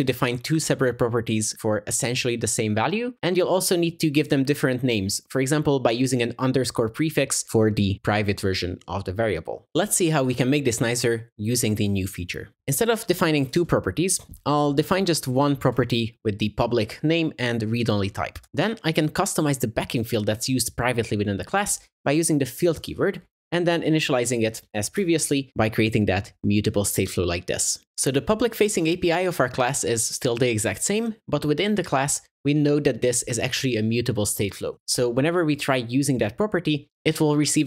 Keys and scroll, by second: 15.6 Delete, 18.4 Tab, 24.7 alt+Up, 24.7 ctrl+w.